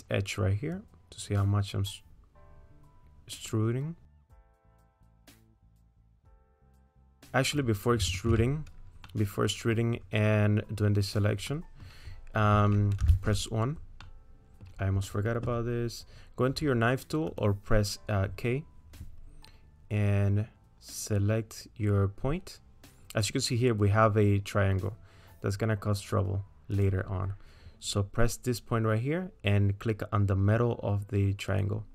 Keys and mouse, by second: 0.8-5.6 drag, 6.1 middle click, 7.2 middle click, 8.4 ctrl+z, 9.1 click, 11.5 click, 13.1 1, 14.0 middle click, 17.4 click, 26.7-31.9 drag.